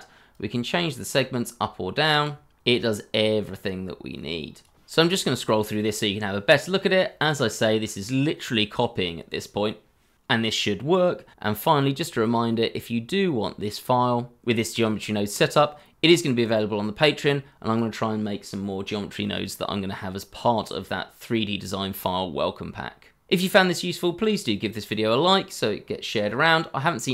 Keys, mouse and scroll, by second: 2.5 scroll down 1, 2.7 middle click, 5.9 shift+middle click, 5.9 scroll down 1, 6.0 shift+middle click, 6.1-6.5 scroll up 4, 6.1 shift+middle click, 6.4 shift+middle click, 6.8 middle click.